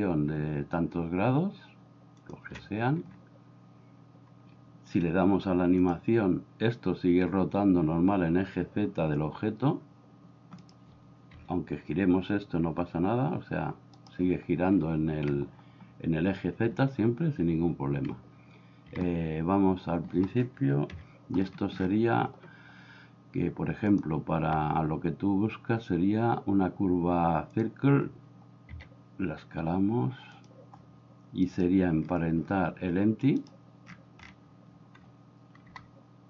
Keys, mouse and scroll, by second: 5.9 click, 11.4 r, 18.9 Escape, 20.9 KP_7, 24.0-27.6 drag, 28.8 s, 35.7 g.